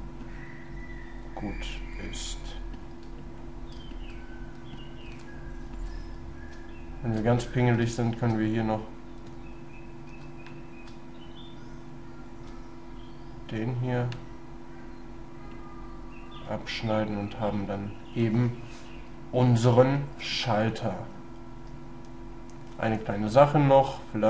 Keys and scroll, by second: 6.6 shift+space, 9.3 space.